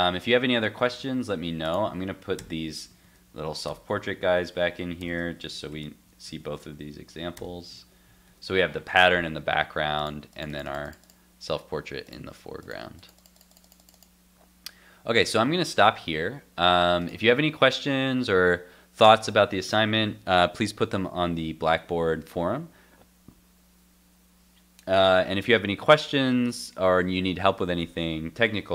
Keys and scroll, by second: 2.4 super+/, 7.3 super+/, 7.4 super+s, 7.8 super+Tab.